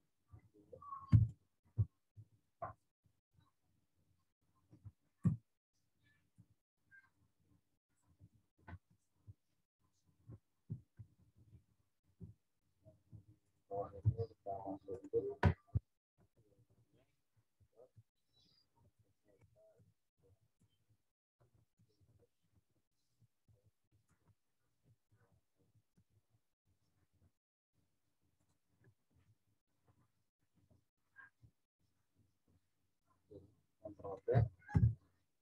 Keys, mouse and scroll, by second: 1.1 m, 1.3 click, 2.1 ctrl+t, 2.7 alt+shift+click, 5.2 Return, 6.3 v, 7.1 click, 8.6 ctrl+t, 9.4 alt+shift+click, 10.6 Return, 10.9 Left, 13.1 z, 13.4 click, 13.9 t, 14.9 click, 16.3 shift+w, 18.5-24.7 typing, 28.3 click, 29.2 ctrl+t, 31.3 alt+shift+click, 34.7 Return.